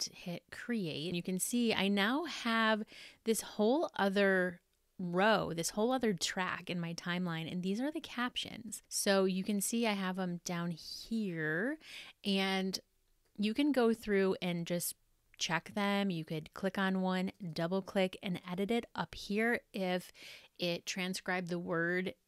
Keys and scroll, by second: 1.0 super+-.